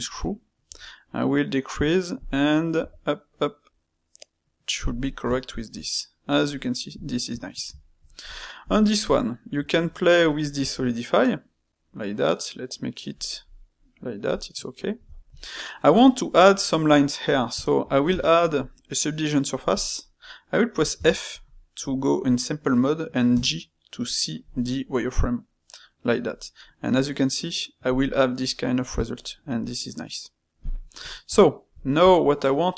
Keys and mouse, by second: 5.3-8.3 shift+middle drag, 8.6 click, 9.0 click, 9.5 space, 13.4-20.5 middle drag, 28.4-30.7 middle drag, 31.0-32.7 shift+middle drag.